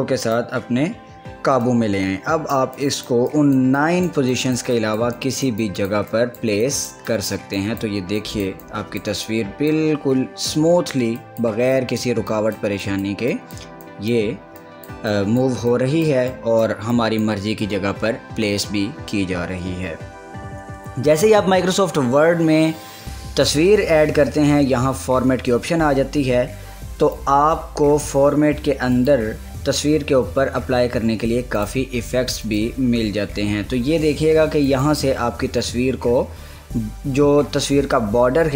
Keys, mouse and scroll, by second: 1.4-10.5 drag, 10.5 scroll up 1, 11.4 click, 12.6-19.7 drag, 27.3-29.1 drag, 31.8 click, 35.3 click.